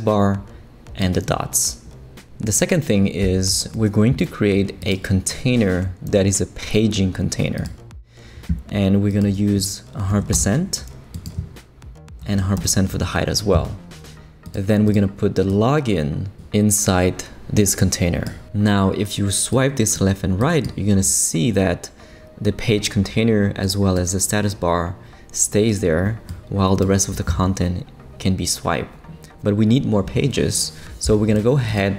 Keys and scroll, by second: 10.1 shift+5, 10.3 shift+Return, 11.3 Return, 12.2 shift+5, 12.6 shift+Return, 13.4 Return.